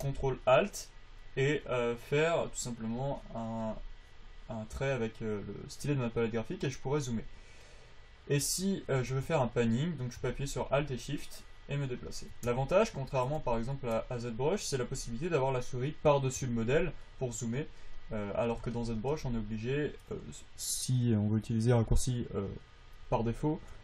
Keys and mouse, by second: 3.2 click.